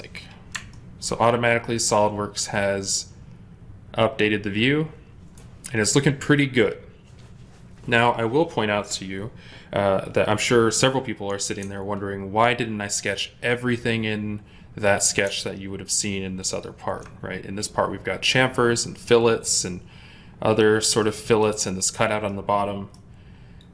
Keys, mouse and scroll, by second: 0.6 ctrl+middle click, 15.1 ctrl+Tab, 16.4 ctrl+click, 20.9 middle click.